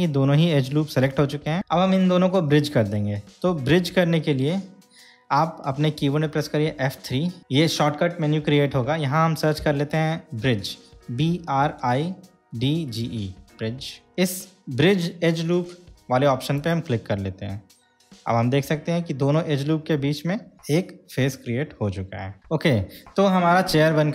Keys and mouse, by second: 6.9 F3, 18.6-22.4 middle drag.